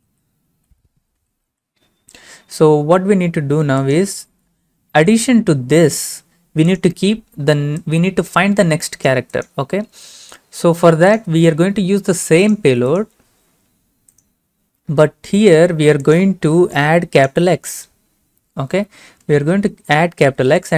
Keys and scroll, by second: 0.0-2.0 typing.